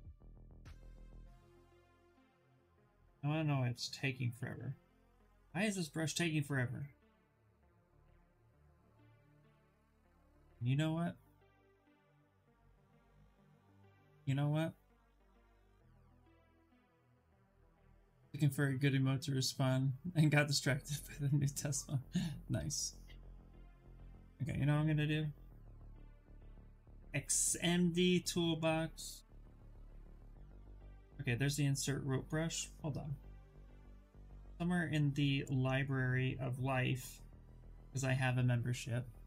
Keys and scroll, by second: 28.9-30.1 typing.